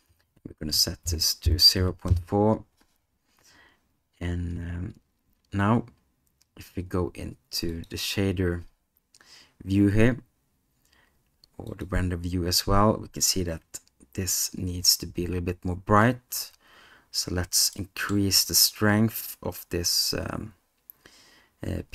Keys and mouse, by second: 7.8 click, 11.7 click, 17.7 middle click.